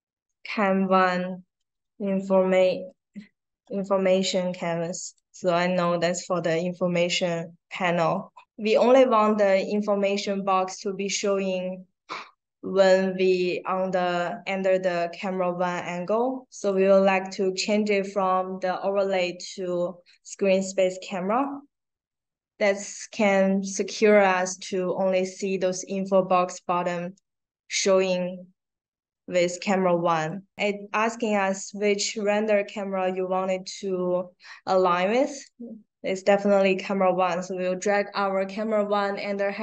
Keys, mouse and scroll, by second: 0.0-2.6 typing, 4.2 space, 5.0 click, 5.6 click, 7.6 click, 9.1 click, 16.5 click, 21.2 click, 30.1 click, 35.4-39.6 drag.